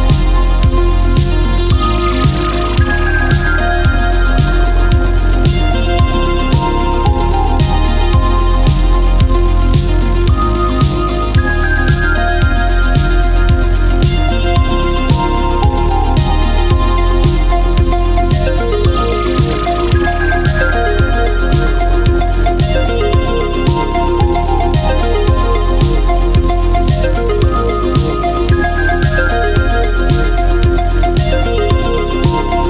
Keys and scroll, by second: 7.0 ctrl+z, 11.5 space, 17.0 ctrl+z, 18.9 ctrl+z, 22.9 space, 29.3 ctrl+z.